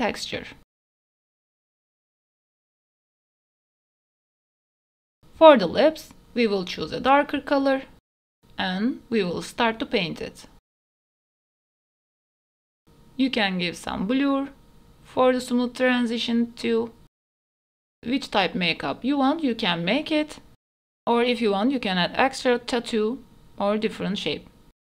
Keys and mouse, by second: 0.2-1.6 drag, 6.8 middle click, 8.1 shift+click, 8.5-10.1 drag, 10.1 shift+middle click, 10.5 click, 10.8 click, 11.2 e, 11.6 click, 11.7 middle click, 11.9 middle click, 12.5 click, 12.6 middle click, 12.9 ctrl+s, 13.6 click, 14.1 click, 15.0 middle click, 16.4 ctrl+s, 16.5 f, 17.0 click, 17.4 middle click, 17.6 middle click, 17.9 click, 19.1 ctrl+z, 19.1 click, 19.3 f, 19.6 middle click, 20.4 middle click, 20.7 click, 21.1 click, 21.8 middle click, 22.2 click, 22.6 middle click, 23.6 middle click, 23.9 click, 24.2 click.